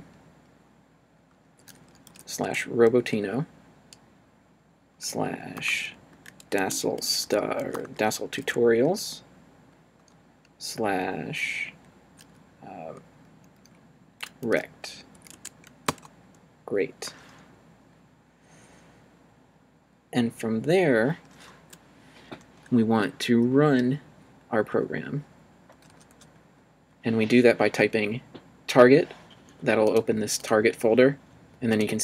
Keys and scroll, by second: 1.2 /, 2.1 r, 2.4 Tab, 4.9 /, 5.6 BackSpace, 5.7 d, 6.1 a, 6.6 Tab, 7.2 s, 7.7 BackSpace, 8.1 t, 8.4 Tab, 14.4 r, 15.1 e, 15.3 Tab, 15.8 Return, 24.7 Up, 26.1 Up.